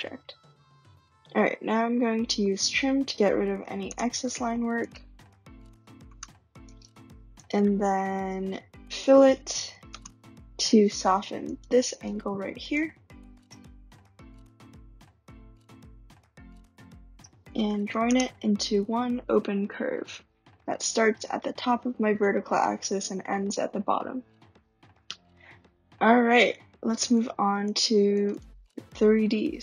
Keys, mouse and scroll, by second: 0.4-0.9 drag, 2.2-4.2 typing, 3.8 Return, 4.9 click, 6.7 click, 7.4 click, 7.6-9.4 typing, 11.5 click, 11.5 typing, 11.9 click, 12.7 click, 13.7 click, 14.3 click, 15.7 ctrl+click, 17.6-19.4 typing, 26.9 click, 27.1 click, 27.8 click, 28.1 click, 28.3 click.